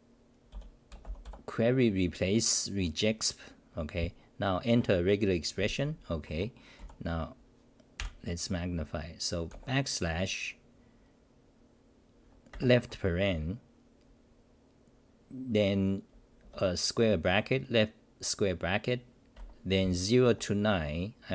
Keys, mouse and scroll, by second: 6.3 Home, 6.8 u, 7.9 ctrl+=, 20.2 End.